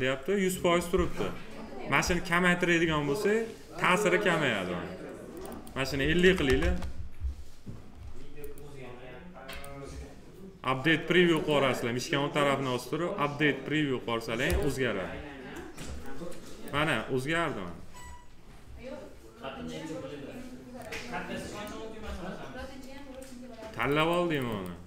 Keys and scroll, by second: 6.1 5, 6.5 Return.